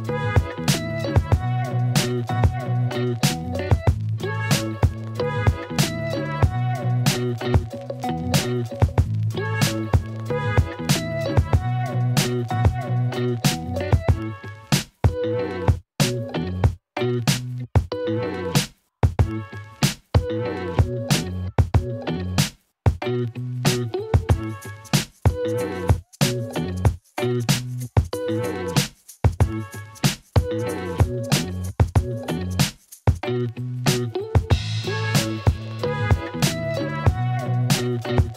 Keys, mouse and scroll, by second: 1.1 KP_1, 1.6 g, 1.8 z, 1.9 z, 6.2 ctrl+alt+click, 6.5 alt+shift+click, 7.3 click, 7.9 g, 8.0 z, 9.6-10.8 drag, 13.2 x, 14.1 alt+middle click, 14.2 z, 16.3 shift+y, 19.4 click, 20.0 g, 20.6 shift+y, 28.1 e, 28.3 y, 30.9 alt+click, 31.3 alt+click, 31.7 Tab, 32.2 alt+click, 33.7-34.3 drag, 36.2 s, 37.6 alt+click.